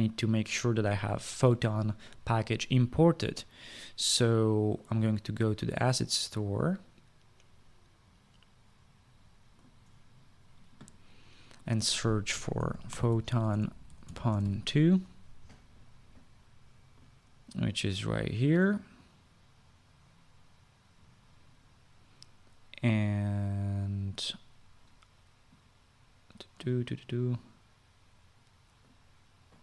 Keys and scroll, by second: 12.7-15.6 typing.